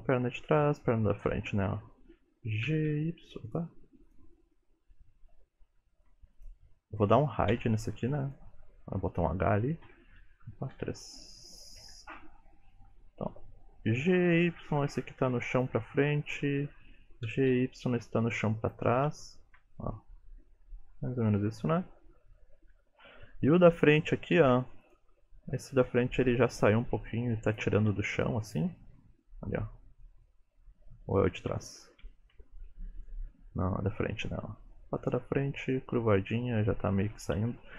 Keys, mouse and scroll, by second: 1.3 KP_3, 2.7 g, 4.1 click, 4.6 middle click, 5.3-5.8 scroll down 8, 6.0 shift+middle click, 6.4 click, 7.6 h, 8.3 click, 9.9 KP_1, 10.8 KP_3, 11.8 KP_Decimal, 12.5-13.8 scroll down 15, 13.8-14.1 scroll down 1, 14.1 g, 16.3 click, 17.3 g, 19.4 shift+middle click, 19.8 middle click, 22.8 KP_3, 23.5 shift+middle click, 23.8-24.1 scroll up 4, 24.2 shift+middle click, 24.9 click, 26.0 r, 26.8 g, 27.8 r, 28.5 middle click, 28.7 scroll down 1, 29.3 middle click, 29.3-29.8 scroll down 3, 30.1 middle click, 31.2 shift+middle click, 31.6 middle click, 32.1 shift+middle click, 32.4-32.8 scroll up 5, 33.1 middle click, 35.8 middle click, 36.2-37.1 scroll down 1, 37.1 scroll down 3, 37.1 KP_3, 37.6 alt+z.